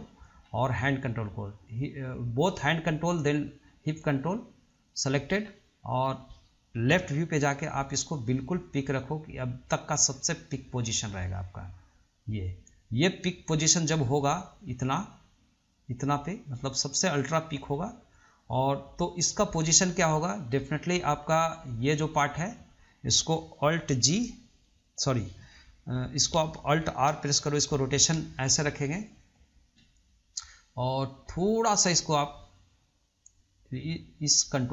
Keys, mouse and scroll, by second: 0.2-0.6 middle drag, 0.6 scroll up 1, 1.3 click, 3.2 shift+click, 4.9 shift+click, 5.5 scroll down 1, 5.7-7.1 middle drag, 7.1 KP_3, 8.8 click, 22.1 click, 27.4 alt+r, 32.9 click, 33.9 click.